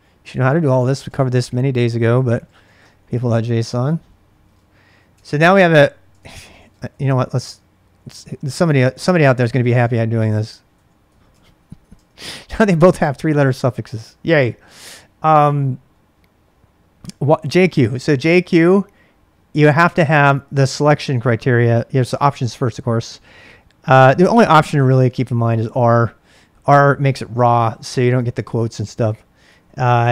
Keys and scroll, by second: 0.0-4.9 typing, 5.1 Tab, 6.1 ctrl+c, 6.3-12.3 typing, 17.1-17.9 typing, 19.7 typing, 24.3-25.0 typing, 29.4 BackSpace.